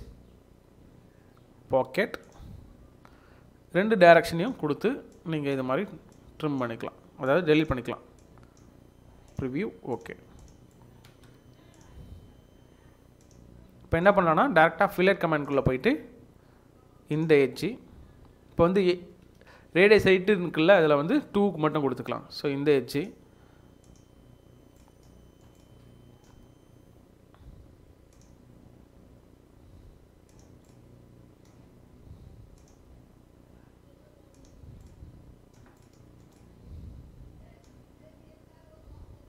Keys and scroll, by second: 11.1 space, 19.6 2.